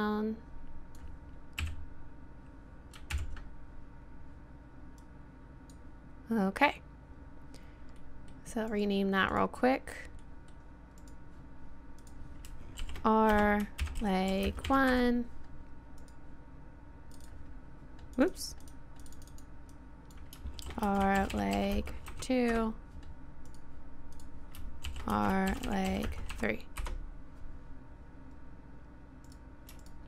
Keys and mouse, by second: 1.6 KP_7, 3.1 ctrl+KP_1, 8.5 click, 8.7-14.0 right drag, 12.0-13.8 drag, 16.0-19.1 right drag, 23.5 click, 25.2 click, 25.2 right click, 26.1-29.3 middle drag, 29.3-30.0 drag.